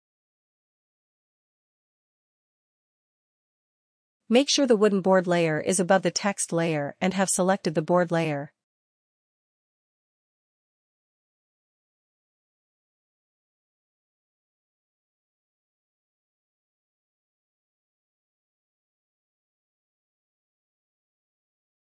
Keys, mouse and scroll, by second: 0.0-5.3 drag, 0.0 a, 5.2 a, 7.1-17.9 drag.